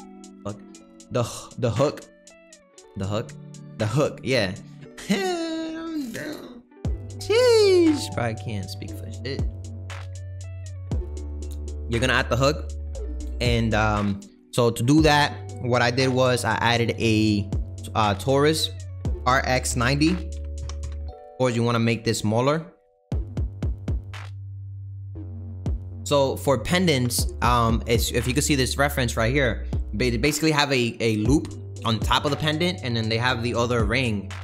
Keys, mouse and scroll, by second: 15.6-17.7 scroll up 1, 17.7 shift+a, 18.4-18.7 scroll down 2, 19.2 r, 21.8 s, 24.4 Delete, 26.2-34.4 middle drag.